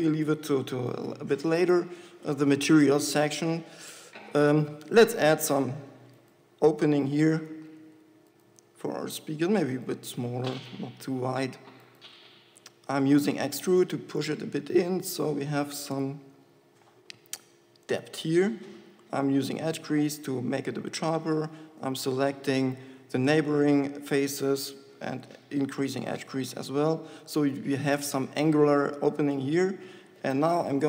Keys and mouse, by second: 8.0 ctrl+z, 13.7 e, 18.4-19.5 drag, 19.5 shift+e, 20.6-22.1 drag, 22.1 ctrl+KP_Add, 25.4 shift+e, 26.9 Tab.